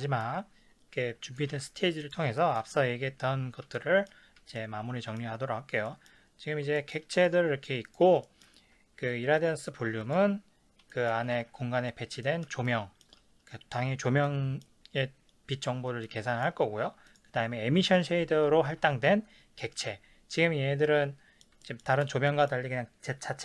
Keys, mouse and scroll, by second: 1.2 click, 1.5 ctrl+s, 2.0 click, 2.4-6.3 shift+middle drag, 6.8-7.2 shift+middle drag, 7.2 drag, 7.9 click, 8.2-9.4 shift+middle drag, 9.4 click, 10.0 click, 10.9-17.1 shift+middle drag, 11.4 ctrl+s, 17.1 click, 17.8 click, 18.7 KP_Decimal, 19.3 scroll down 1, 20.3-23.4 middle drag.